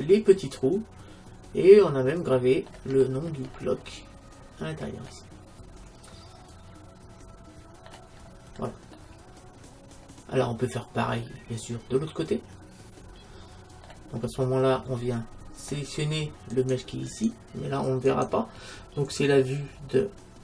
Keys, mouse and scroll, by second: 3.1-6.9 middle drag, 8.2-10.8 middle drag, 14.2-16.6 middle drag, 14.2-14.8 scroll down 1, 16.6-20.4 right drag.